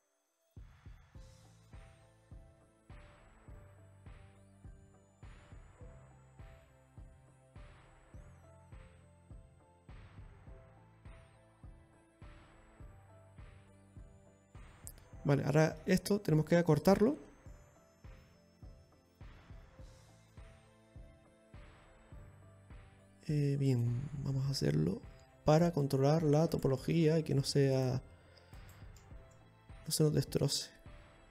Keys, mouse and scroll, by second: 0.8 middle click, 3.2-3.9 scroll down 1, 3.9 KP_1, 5.3 scroll down 1, 5.6 middle click, 6.9 shift+right click, 7.8-8.6 scroll up 6, 9.2 shift+right click.